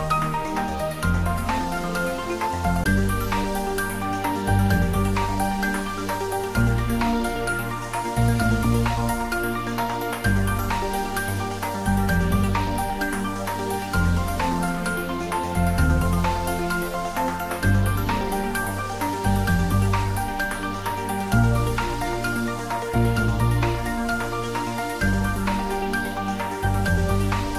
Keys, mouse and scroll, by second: 2.5 shift+click, 6.8 ctrl+z, 8.5 shift+click, 13.6 click, 14.0-16.9 right drag, 16.9 click, 17.9 click, 24.3 click.